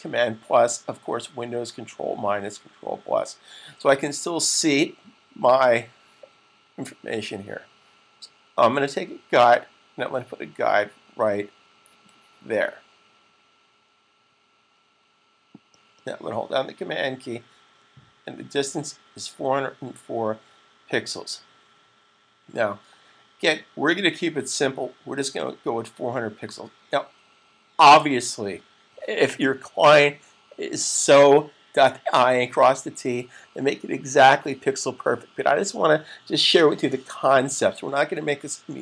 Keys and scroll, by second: 1.6-2.3 typing.